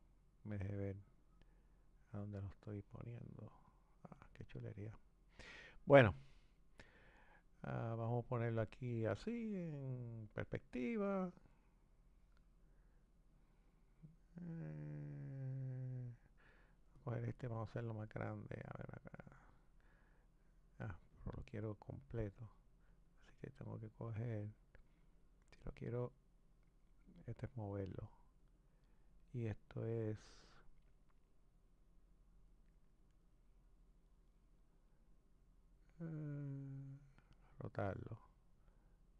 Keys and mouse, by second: 2.1 click, 7.8 click, 10.2 click, 16.9 click, 18.2 click, 21.2 click, 23.1 click, 25.8 click, 27.2 click, 31.7 click, 35.3 click, 38.9 click.